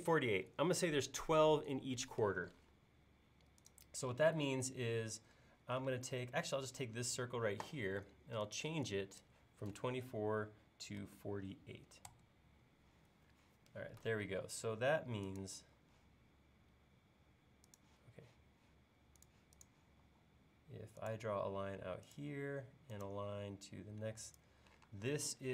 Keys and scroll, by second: 5.9 space, 10.7-11.5 typing, 12.1 Return, 20.0 l, 24.9 space.